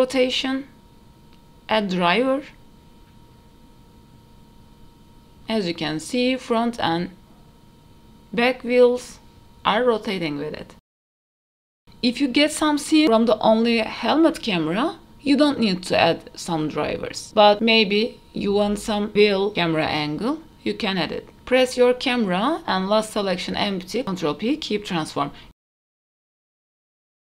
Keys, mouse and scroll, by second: 0.4-5.1 drag, 0.4 right click, 5.6 click, 6.2 shift+middle drag, 7.0 g, 16.4-16.9 scroll up 4, 17.0 shift+middle drag, 17.8 click, 18.6 click, 19.1 click, 20.2 shift+click, 21.2 ctrl+p, 22.8 scroll down 1, 23.7 click, 24.1-24.7 scroll down 4, 24.7 shift+middle drag, 25.3 g, 25.4 KP_0, 26.3 click.